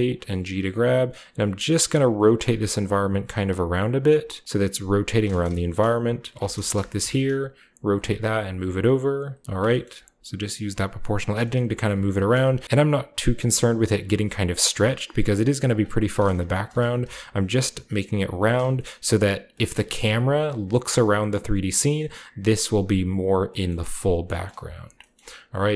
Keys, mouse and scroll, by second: 0.0 click, 0.1-4.4 typing, 0.7-4.4 drag, 3.8-4.4 scroll up 1, 4.4-4.9 scroll down 1, 6.9 r, 7.3-8.3 scroll down 1, 7.8 click, 7.9-9.9 typing, 8.8 click, 9.3 click, 9.6-11.2 shift+drag, 11.2 middle click, 11.8 alt+click, 12.1-13.4 right drag, 12.6-14.5 scroll up 1, 12.6 typing, 13.8-15.2 drag, 14.0 typing, 15.2-15.6 scroll up 1, 15.6-17.2 drag, 16.5 alt+middle click, 17.0 typing, 17.4-18.4 scroll down 1, 17.5-19.5 alt+drag, 18.5 typing, 18.7-20.4 middle drag, 19.2-21.8 scroll up 1, 20.8-21.8 shift+middle drag, 24.1 middle click, 24.1-25.1 scroll down 1, 24.5 Tab, 25.6 alt+right click.